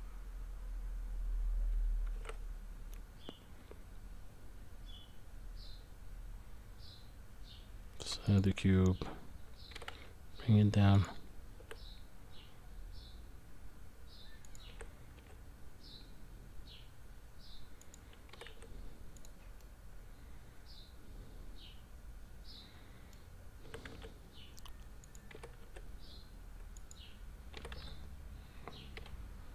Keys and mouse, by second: 2.1 shift+a, 9.7 g, 11.6 s, 19.8-23.1 middle drag, 19.8 g, 23.6 s, 25.3 g, 27.5 g.